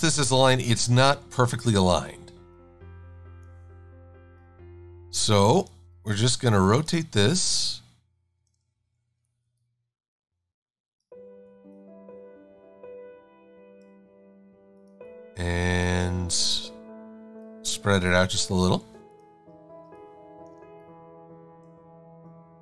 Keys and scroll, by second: 5.7 e.